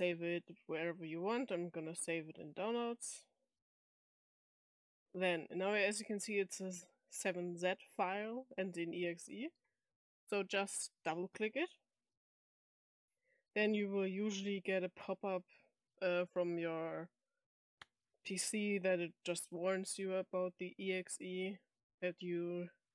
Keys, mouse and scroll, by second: 0.3 click, 1.8 click, 2.9 click, 4.1 click, 10.9 click, 11.1 click.